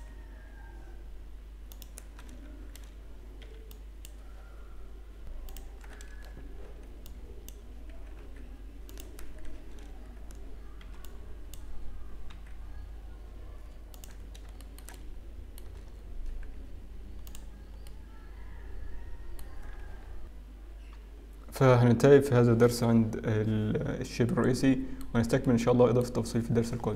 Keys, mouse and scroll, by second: 0.9 g, 2.2 a, 2.7 alt+a, 3.4 b, 5.4 click, 5.4 g, 10.9 alt+a, 10.9 b, 12.3 g, 14.0-14.9 scroll down 1, 14.9 shift+middle click, 14.9-15.3 scroll down 1, 15.7 Tab, 15.9-16.4 scroll down 3, 17.5 z, 17.8 middle click, 24.9 middle click, 26.0 middle click.